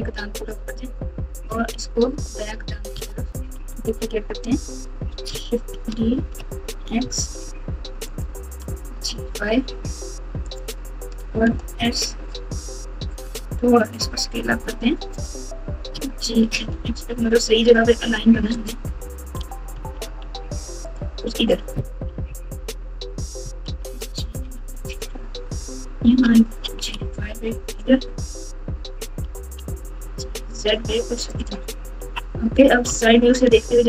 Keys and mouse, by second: 0.4 click, 0.8-2.3 drag, 2.9 alt+z, 3.5 KP_4, 3.6 KP_4, 3.8 KP_4, 4.0 KP_4, 5.7 shift+d, 8.8 g, 11.1 s, 13.6 s, 15.9 g, 18.5 click, 19.3 g, 21.9-22.5 typing, 23.6 g, 26.6 g, 29.2 g, 31.9 KP_3, 32.8 KP_1.